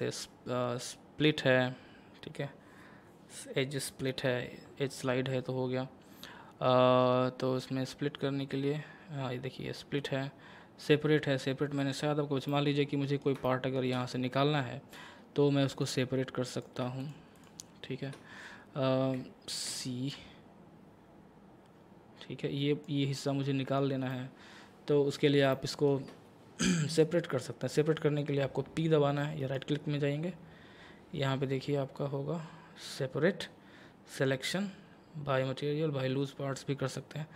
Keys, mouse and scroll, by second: 12.1 scroll down 1, 12.5 middle click, 15.7 click, 19.7 c, 20.1-23.7 drag, 23.7 right click, 24.1-25.5 middle drag, 25.5-25.8 scroll up 1, 25.8-28.5 middle drag, 29.4 right click.